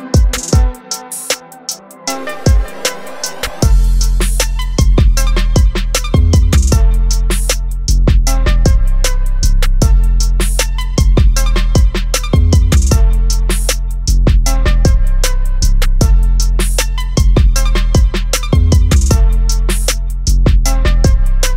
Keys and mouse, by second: 2.4 click, 6.8 click, 8.9 click, 13.4 click, 15.4 b, 16.4-17.2 ], 17.3 ], 18.4-19.4 typing, 20.6 click.